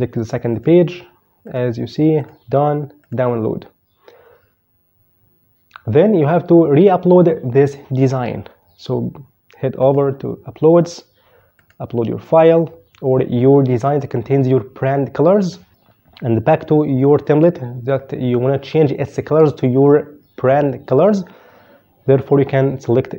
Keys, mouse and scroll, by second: 9.5 click, 10.4 click, 11.3 click, 15.2 click.